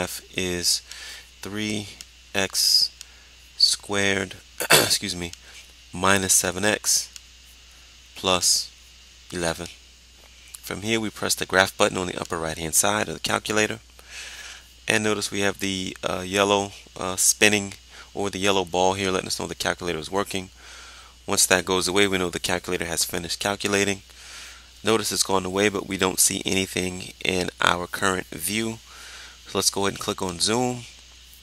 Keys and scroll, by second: 1.0 3, 5.5 -, 6.4 7, 9.9 1.